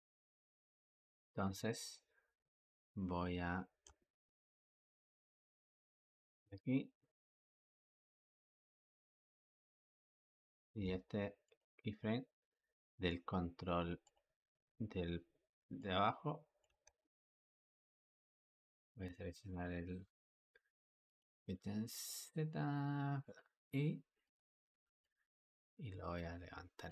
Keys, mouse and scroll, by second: 1.0 Escape, 3.9-6.1 ctrl+middle drag, 6.1-9.1 drag, 9.4-11.3 shift+middle drag, 11.3 click, 13.9 click, 15.6 click, 16.7 ctrl+z, 17.4-18.4 drag, 19.4 click, 20.9 click, 23.1 click, 24.1 click, 24.9 click.